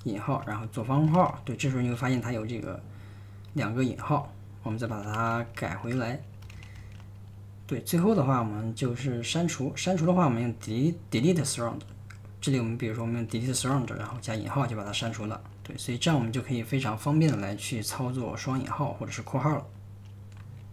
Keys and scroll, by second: 0.0-7.3 typing, 8.4-10.2 typing, 13.1-16.6 typing.